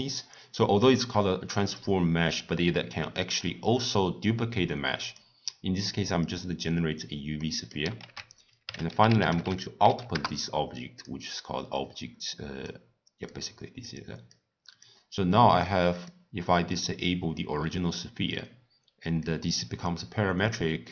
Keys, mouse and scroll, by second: 0.0 click, 5.1 click, 6.3-10.4 drag, 10.4 ctrl+a, 13.0 click, 13.5 click, 14.0 click, 15.9-16.8 drag, 19.4-20.9 drag.